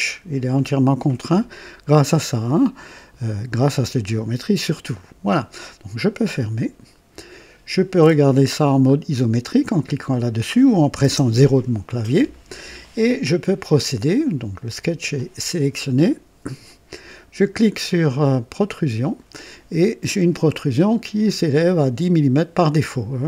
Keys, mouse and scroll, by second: 6.3 click, 10.9 KP_0, 18.5 click.